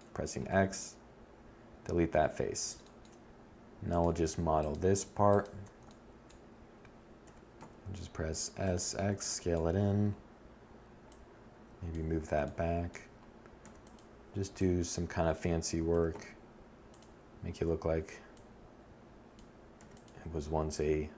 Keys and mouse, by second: 2.8-5.5 middle drag, 5.5 s, 9.3 middle click, 11.9 e, 14.1 s, 18.0 e, 20.8 s.